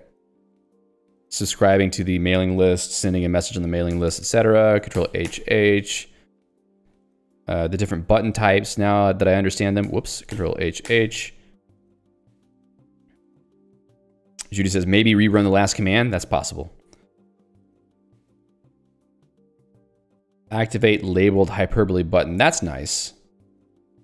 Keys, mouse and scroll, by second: 4.0 ctrl+g, 9.2 w, 9.9 ctrl+g, 18.9 a, 22.5 ctrl+j.